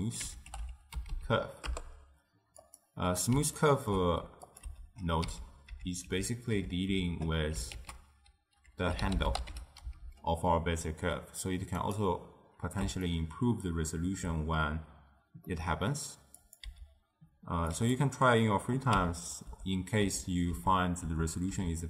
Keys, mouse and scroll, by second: 1.2 Down, 3.6-4.6 ctrl+middle drag, 4.6 click, 4.7-7.0 typing, 7.9 ctrl+a, 13.1-16.5 ctrl+middle drag, 16.5 click, 16.9 m, 17.9 click, 19.1 m, 19.7 m, 20.8 m, 21.1 m, 21.7 m.